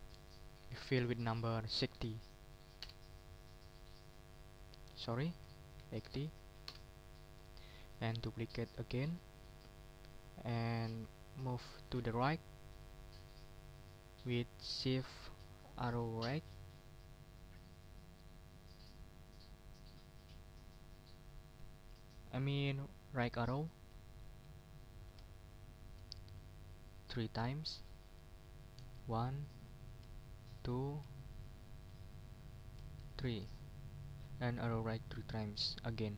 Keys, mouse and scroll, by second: 0.6 ctrl+a, 1.9 6, 2.2 0, 2.8 Return, 3.8 middle click, 4.7 ctrl+click, 5.2 ctrl+a, 5.8 ctrl+8, 6.0 0, 7.1 Return, 7.1 middle click, 7.8 right click, 9.1 click, 28.8 shift+Right, 30.3 shift+Right, 33.0 shift+Right.